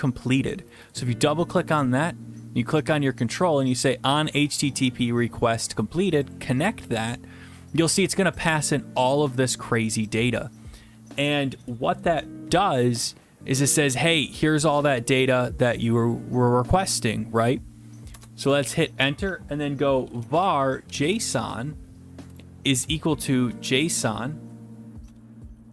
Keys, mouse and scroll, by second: 0.8 click, 0.9 click, 6.3 click, 9.4 click, 10.2 click, 18.1 Return, 20.0-21.1 typing, 22.5-23.9 typing, 25.2-25.7 typing.